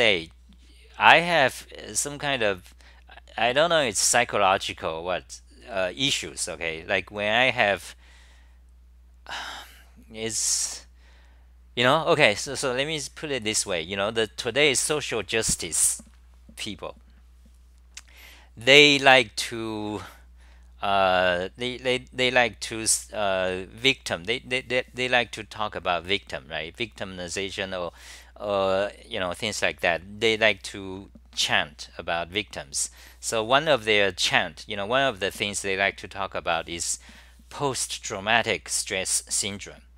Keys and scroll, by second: 7.9-8.6 typing.